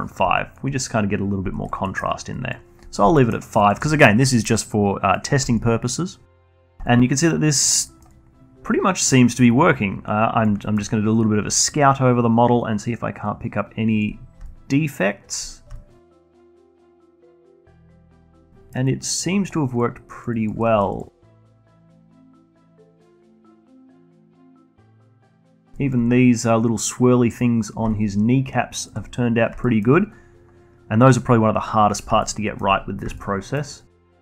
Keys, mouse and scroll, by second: 5.3-5.8 alt+middle drag, 5.8 alt+click, 6.6 alt+middle click, 7.0-8.6 alt+drag, 8.6 middle click, 9.0-10.6 alt+drag, 10.6 scroll down 1, 10.8-11.8 alt+drag, 11.8 alt+middle drag, 12.1-14.6 alt+drag, 14.6 alt+middle drag, 14.8-17.8 alt+drag, 18.1-18.4 scroll up 2, 18.4-19.5 alt+drag, 19.5 scroll up 1, 19.7-20.8 alt+drag, 20.8 scroll down 2, 21.1-22.4 alt+drag, 22.4-22.8 alt+middle drag, 22.8-24.6 alt+drag, 24.6 alt+middle click, 24.9 alt+drag, 25.1-25.5 alt+middle drag, 25.5 alt+drag, 25.7 scroll up 1, 26.0 alt+middle drag, 26.2-28.1 alt+drag, 28.1-28.4 scroll down 1, 28.4-29.7 alt+drag, 29.7-30.1 scroll up 1, 30.1-31.6 alt+middle drag, 31.6-32.7 scroll down 2, 32.7-33.3 alt+middle drag, 33.3-33.6 scroll down 1, 33.6-34.2 alt+middle drag.